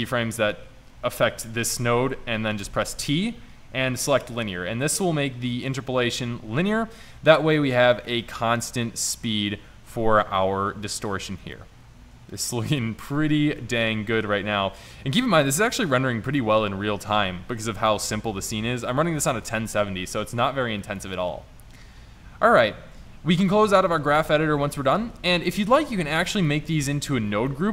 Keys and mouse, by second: 2.7 t, 5.1-5.7 middle drag, 26.2 click, 26.7 click, 27.3 click.